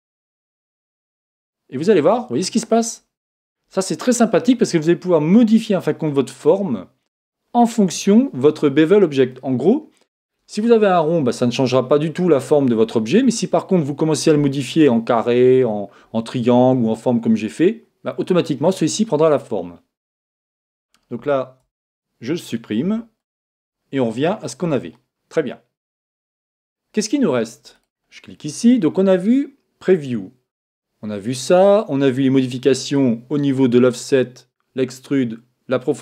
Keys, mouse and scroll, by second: 0.4 right click, 0.9 g, 2.5 click, 2.8-5.1 middle drag, 7.9-11.2 middle drag, 18.7-21.1 middle drag, 21.6 Tab, 22.8 x, 23.8-29.4 middle drag, 27.7 right click.